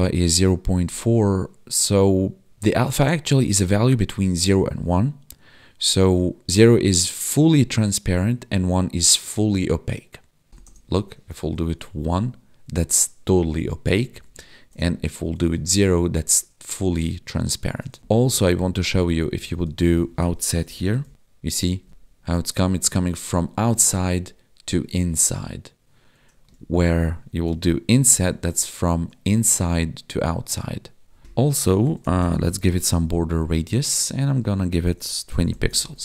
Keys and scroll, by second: 11.5 ctrl+s, 14.0 ctrl+z, 15.3 ctrl+s, 18.0 ctrl+Left, 19.4 Left, 21.1 ctrl+s, 21.8 Left, 21.9 Right, 26.5 ctrl+z, 28.0 ctrl+s, 33.4 Down, 33.7 Tab, 35.8 ctrl+s.